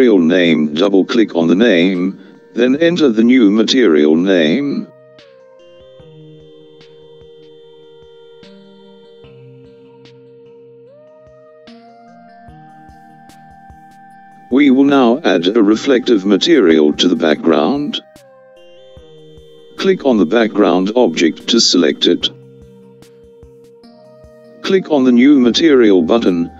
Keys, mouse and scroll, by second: 0.5-3.8 scroll up 7, 3.8 click, 4.0-7.8 drag, 24.3 click.